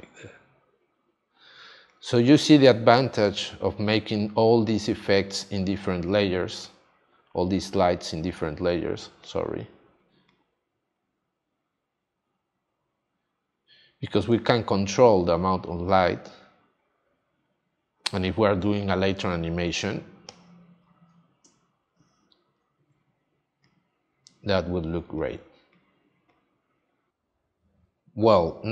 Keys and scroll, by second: 2.4 space, 19.7 space, 27.1 space.